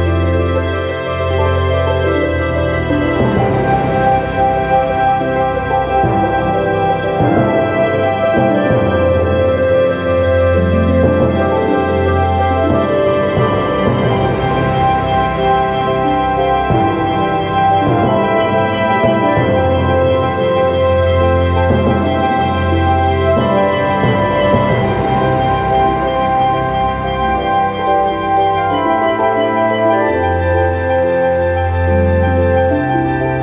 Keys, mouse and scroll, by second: 0.3 click, 2.2 click, 6.2-9.6 drag, 9.7 1, 10.2 2, 11.0 scroll down 1, 12.8-19.0 drag, 19.7 click, 20.4 click, 21.8 click, 23.4 space, 24.1 click, 25.3 0, 27.7 click, 31.7 click, 33.3 click.